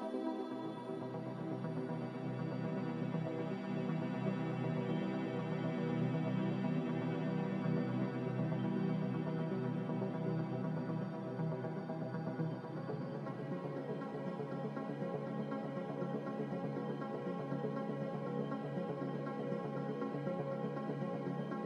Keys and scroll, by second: 0.0-0.3 typing, 3.2 ctrl+z, 3.9-4.7 typing.